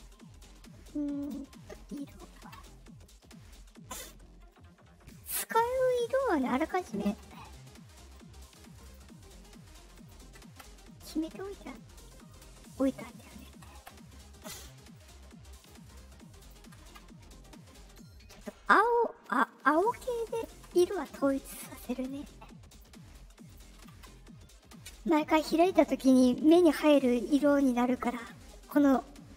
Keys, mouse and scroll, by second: 1.1 click, 1.9 click, 2.5 Return, 3.3 middle click, 4.3 middle click, 5.0 click, 6.5 click, 8.0 middle click, 8.7 click, 9.9 click, 11.6 middle click, 11.6 scroll up 2, 12.2 click, 13.2 click, 14.8 scroll up 2, 15.5 click, 16.4 click, 18.4 middle click, 19.2 click, 20.2 click, 21.9 middle click, 22.6 click, 23.4 click.